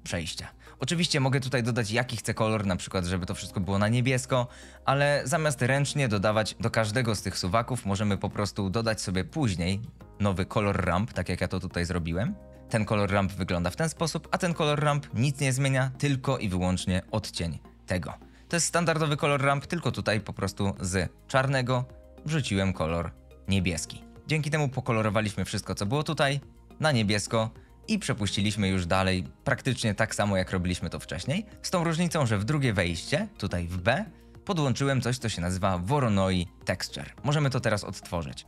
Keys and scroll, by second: 7.9 ctrl+z, 8.7 ctrl+z.